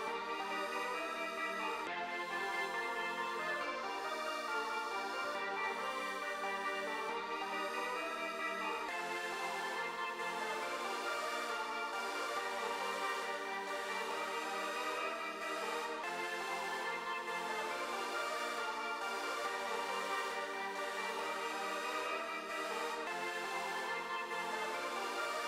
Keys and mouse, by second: 3.7 click, 5.3 click, 7.0 click, 7.6-9.8 drag, 10.4 click, 11.5 click, 17.2 click, 22.3 click.